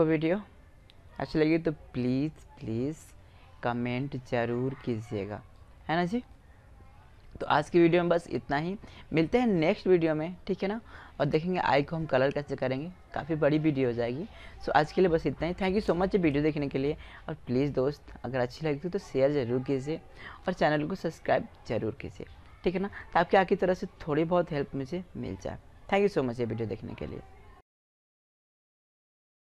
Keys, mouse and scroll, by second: 0.7-2.0 middle drag, 2.5 middle click, 2.6 click, 5.2-7.8 middle drag.